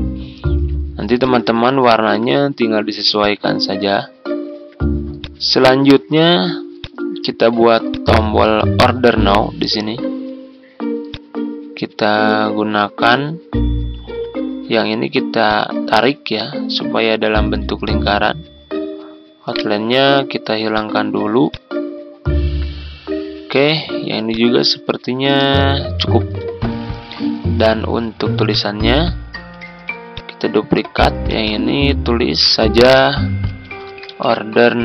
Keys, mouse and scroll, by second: 1.1 click, 1.7 shift+(, 3.1 click, 4.1-4.5 ctrl+scroll down 1, 5.1-9.6 drag, 9.8-11.0 scroll up 1, 11.0 click, 11.9-12.3 scroll up 1, 12.3-13.0 scroll down 1, 13.2 ctrl+scroll up 1, 15.4 click, 19.5 right click, 20.7 click, 21.9 ctrl+scroll down 1, 24.2 click, 25.4 ctrl+z, 26.0 ctrl+scroll down 1, 28.4 click, 29.5 ctrl+d, 30.1 click, 31.7 ctrl+a, 33.2-34.8 typing.